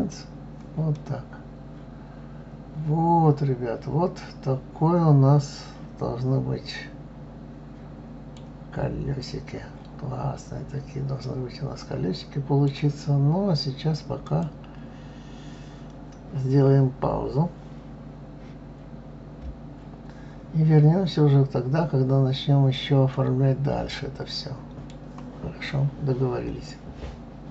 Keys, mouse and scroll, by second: 0.9-3.9 middle drag, 8.7 scroll down 3, 9.3-10.0 scroll up 6, 10.6-11.1 scroll down 3, 11.2-14.2 middle drag, 20.7-23.1 scroll down 1, 23.1-26.1 middle drag.